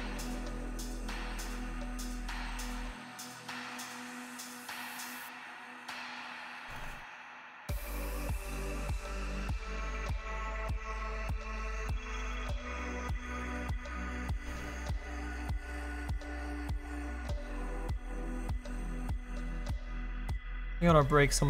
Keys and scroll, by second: 14.6 s.